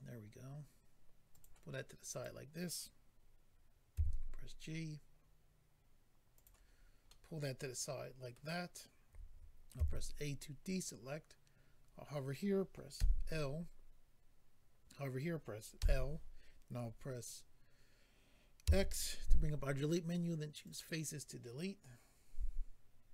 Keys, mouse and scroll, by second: 1.3 click, 2.1 click, 6.3 click, 6.4 click, 6.7-7.1 scroll down 2, 7.1 middle click, 9.8 a, 10.6-11.0 scroll up 4, 12.9 l, 20.6 click, 20.7 click.